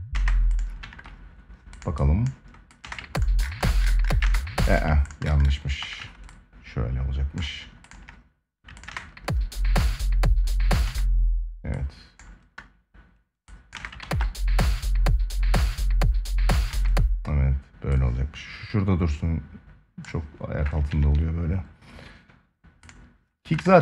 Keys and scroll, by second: 0.5 ctrl+s, 2.5 space, 3.9 space, 5.5 ctrl+a, 8.6 space, 10.6 space, 13.5 space, 13.7 ctrl+s, 16.4 space, 20.6 ctrl+s, 23.3 ctrl+s.